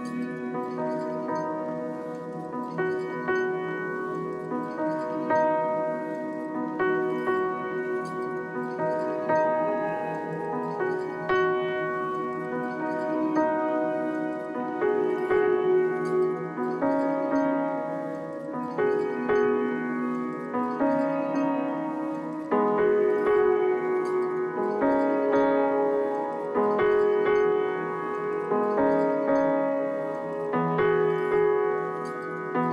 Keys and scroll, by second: 9.5 z, 10.7 z, 11.3 b, 16.6 e, 22.4 b.